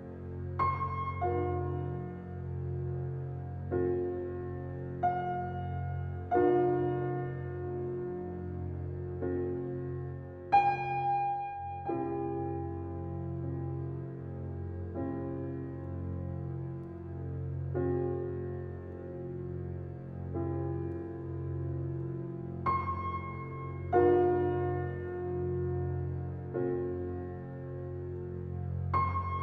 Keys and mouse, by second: 0.0-6.2 typing, 7.3 click, 7.8-13.2 typing, 16.4-18.0 drag, 18.7 click, 21.4 click, 22.2 click, 22.7 click, 24.5 click, 24.7 click, 26.9 click.